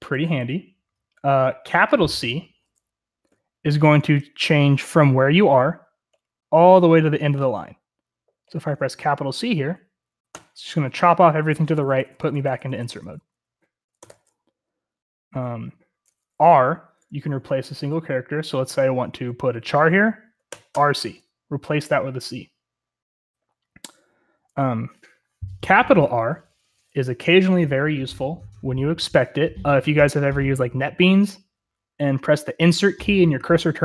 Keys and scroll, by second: 0.1 j, 4.2 typing, 10.3 c, 11.4-14.1 typing, 14.0 Escape, 15.6-17.6 typing, 20.5-21.8 typing, 26.2-26.7 typing.